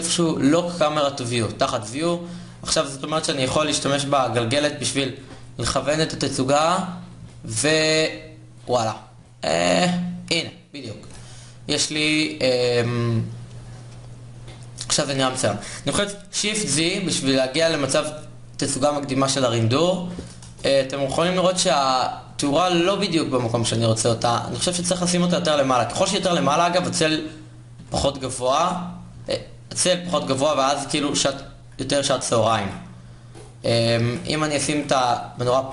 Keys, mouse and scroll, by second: 16.4 shift+z, 20.1 KP_0, 22.0 shift+z, 22.5 KP_7, 24.3 g, 25.5 KP_0, 29.6 shift+z, 29.9 g, 31.5 g, 32.2 shift+z, 34.1 g, 35.3 shift+z.